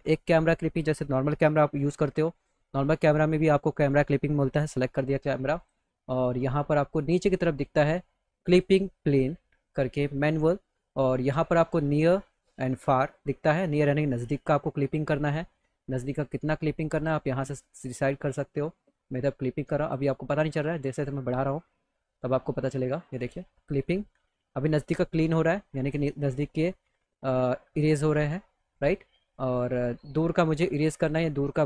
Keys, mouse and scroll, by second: 1.8 ctrl+c, 3.2 click, 4.4 click, 5.5 click, 7.0 click, 10.1 click, 13.8-17.0 drag, 18.6-19.9 drag, 21.4 click, 22.4-24.0 drag, 25.5 click, 29.1 click, 30.5-31.6 drag.